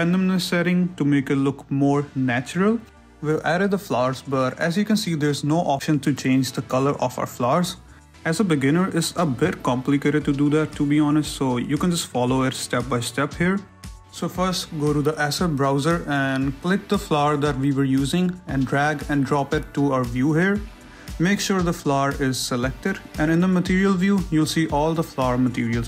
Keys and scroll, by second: 1.2 shift+z, 6.3 shift+z, 23.4 shift+z.